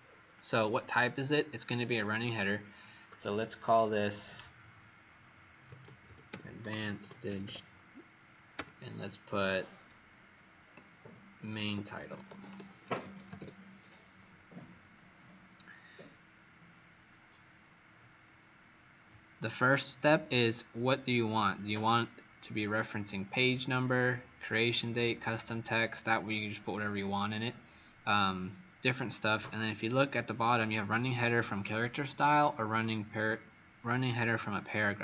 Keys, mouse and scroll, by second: 5.3-7.9 typing, 11.3-13.8 typing, 20.3 click.